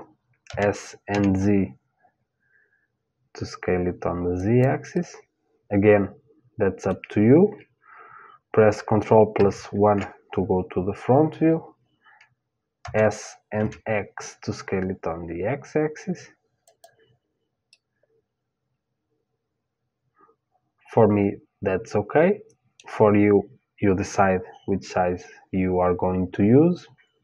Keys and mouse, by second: 0.1 s, 4.5-6.6 middle drag, 9.0 ctrl+KP_1, 10.5-12.6 middle drag, 12.4 s, 17.3-19.3 middle drag.